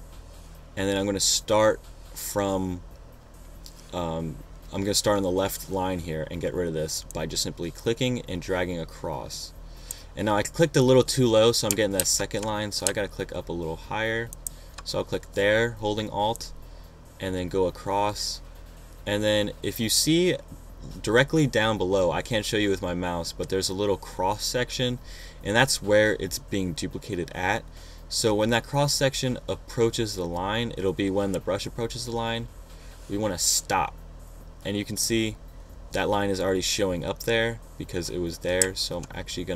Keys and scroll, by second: 12.5 super+z, 13.4 alt+super+z.